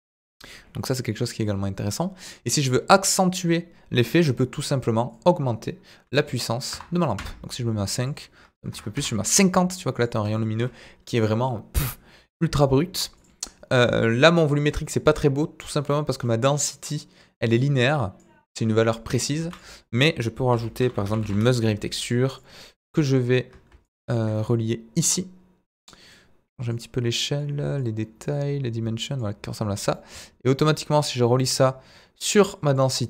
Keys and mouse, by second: 4.2 drag, 15.7-33.0 drag.